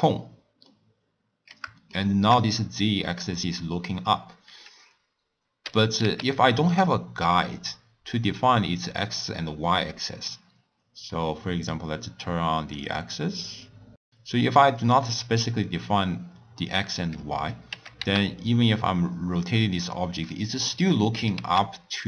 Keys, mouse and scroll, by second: 0.6 scroll up 1, 0.7-4.9 middle drag, 5.6 r, 11.1-12.8 middle drag, 12.8-13.8 drag, 13.8-16.8 middle drag, 17.6 r, 21.1 r.